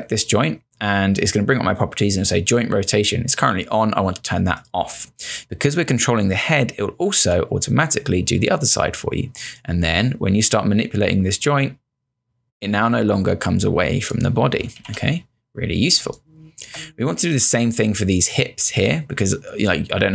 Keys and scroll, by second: 14.8 z, 16.1 space.